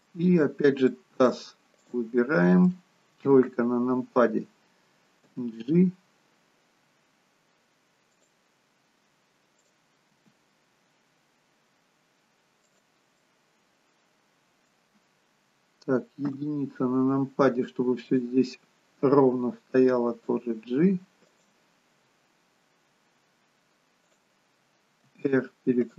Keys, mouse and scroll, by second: 0.9 middle click, 1.8 click, 2.3 middle click, 3.2 KP_3, 6.3 g, 9.6 click, 10.1 g, 13.5 middle click, 18.2 click, 18.2 KP_1, 19.8 g, 24.1 click, 25.1 r.